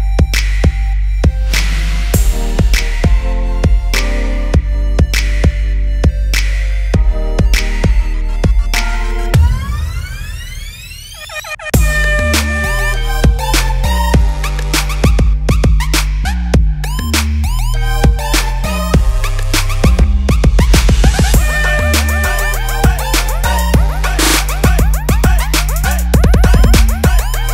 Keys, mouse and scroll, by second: 18.5 click, 20.3 right click, 26.4 click.